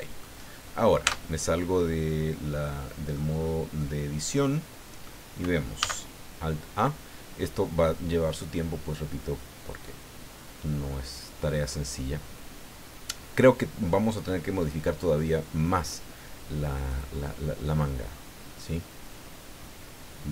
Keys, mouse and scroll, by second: 0.4-1.0 scroll down 1, 1.0 Tab, 1.5-3.3 drag, 3.8-5.2 drag, 5.8 alt+a.